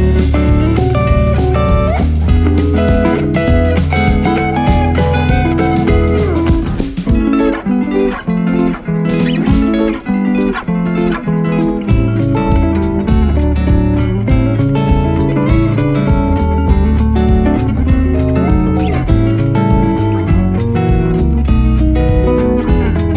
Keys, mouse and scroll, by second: 4.3 ctrl+z, 9.3 ctrl+z, 13.5 ctrl+z, 21.2 ctrl+z.